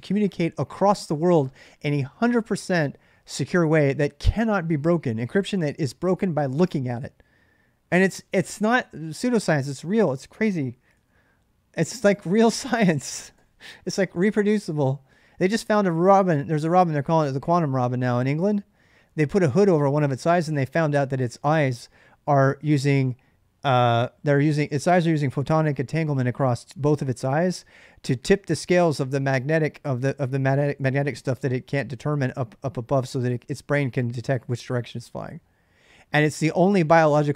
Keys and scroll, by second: 10.6 ctrl+a, 10.7 ctrl+a, 13.1 ctrl+a, 13.1 c.